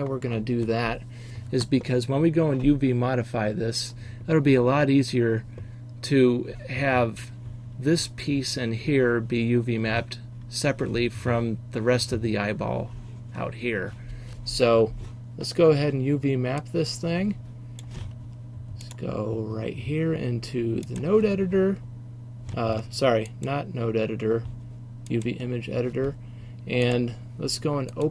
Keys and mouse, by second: 16.7 middle click, 16.9 click, 17.2 middle click, 17.5 click, 17.6 middle click, 18.1 middle click, 18.2-28.1 drag.